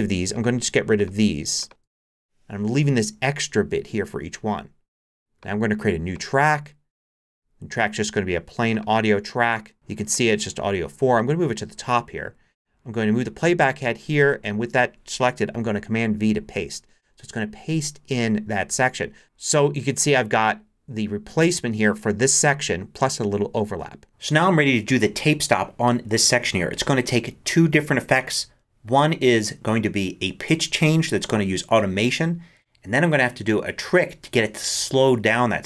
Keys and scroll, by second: 0.6 BackSpace, 16.2 super+v.